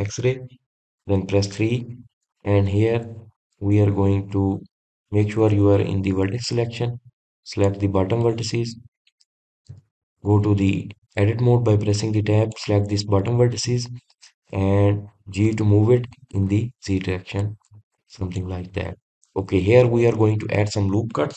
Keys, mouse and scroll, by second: 0.3 shift+z, 2.9 KP_3, 3.9-4.6 scroll up 1, 4.6-5.8 shift+middle drag, 5.8 scroll up 3, 6.7 1, 7.2-7.7 scroll down 1, 7.7 click, 8.5 drag, 9.6 click, 10.3 drag, 11.1 Tab, 13.3 click, 19.6 click, 20.0 scroll up 2, 20.7-21.3 scroll down 1.